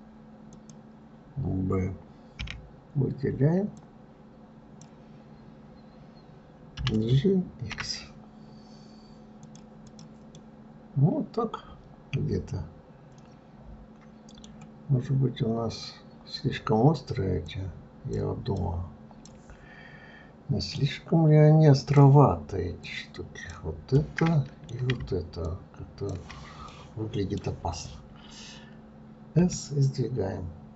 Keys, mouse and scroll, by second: 0.8 click, 2.6 b, 10.1 click, 10.6-13.6 middle drag, 17.7 click, 18.8 click, 21.0-24.2 drag, 24.2-25.7 middle drag, 25.7-27.0 shift+drag, 27.0-29.7 middle drag, 29.7 s.